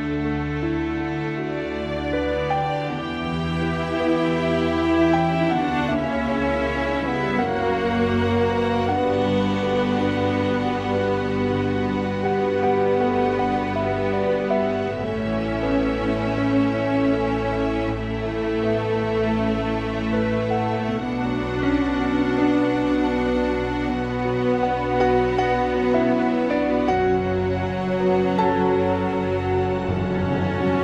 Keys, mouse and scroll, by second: 0.7-1.8 scroll down 5, 1.8-2.3 scroll down 1, 2.3-4.7 drag, 4.7-5.7 scroll down 2, 5.7 click, 8.0-10.6 drag, 11.2 click, 12.9 click, 13.0-14.7 middle drag, 14.7-15.8 scroll down 2, 15.8-16.1 scroll down 1, 16.1 click, 17.4 middle click, 17.6 click, 18.9 r, 26.0 click, 26.6-29.5 middle drag.